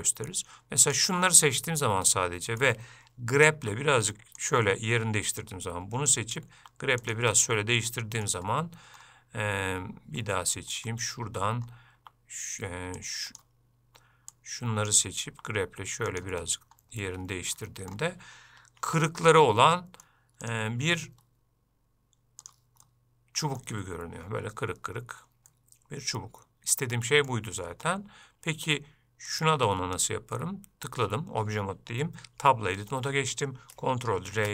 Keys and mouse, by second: 2.2 middle click, 5.5 click, 7.4 middle click, 15.0 click, 17.1 middle click, 19.0 Tab, 19.4 middle click, 20.5 click, 23.0 middle click, 25.6-27.4 middle drag, 29.4 click, 32.5 Tab, 34.3 ctrl+r.